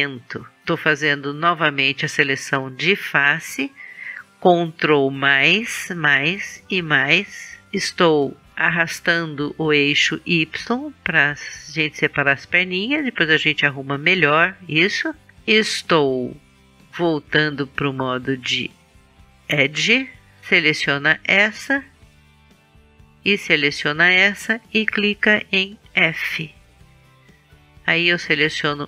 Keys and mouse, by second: 0.9-5.3 middle drag, 5.3 ctrl+KP_Add, 6.0 ctrl+KP_Add, 6.8 ctrl+KP_Add, 9.3-11.1 drag, 11.1 middle click, 13.2-16.9 middle drag, 17.5-19.4 drag, 19.4-20.4 middle drag, 20.4-21.6 right drag, 21.6 middle click, 26.1 f, 28.1-28.8 right drag.